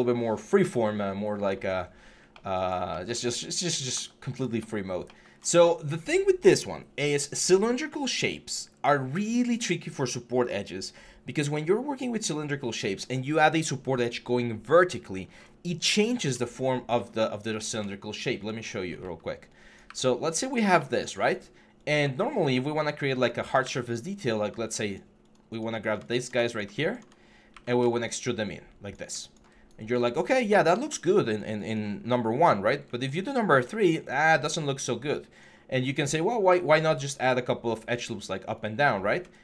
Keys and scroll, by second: 27.3 ctrl+e, 32.2 3, 34.4 1, 38.7 3.